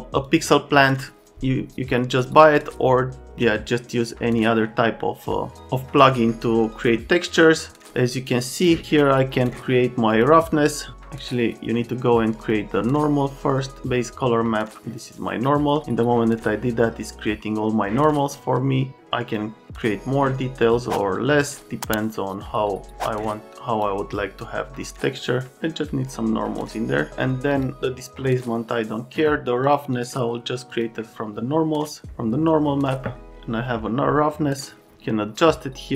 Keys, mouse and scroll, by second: 0.2 click, 4.3 click, 6.8 click, 9.2 click, 10.1 click, 11.4 click, 12.4 click, 15.2 click, 18.9 click, 23.5 click, 24.4 click, 25.5 click, 34.7 right click.